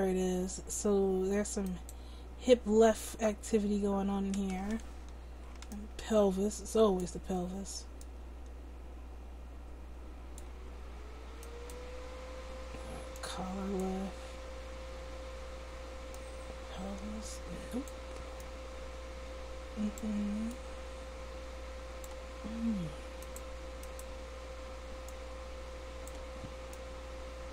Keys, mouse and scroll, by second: 13.1-14.7 right drag, 23.2-27.5 right drag, 25.1-27.5 drag.